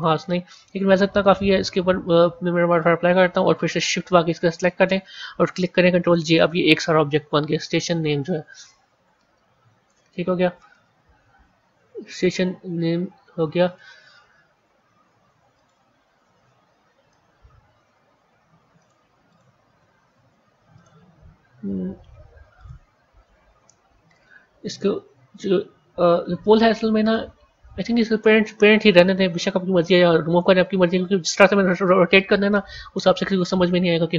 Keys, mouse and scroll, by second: 1.2 click, 2.6-4.4 drag, 6.0 ctrl+j, 8.5 click, 10.2-10.7 scroll up 5, 15.4 click, 18.3 r, 19.2 click, 19.9 r, 22.4 click, 26.4-27.6 middle drag, 27.6 scroll up 2, 28.3 scroll down 1, 32.9-34.1 scroll up 1.